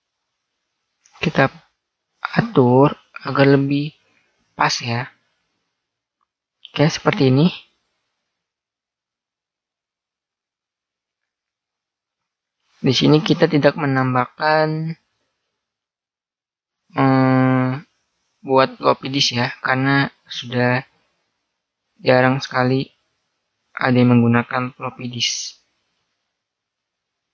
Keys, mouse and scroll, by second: 0.1-1.0 scroll up 2, 1.0-1.3 scroll up 1, 1.3 click, 2.1 middle click, 3.5-5.2 middle drag, 5.2 right click, 8.1-10.9 middle drag, 23.5 right click, 25.0 z.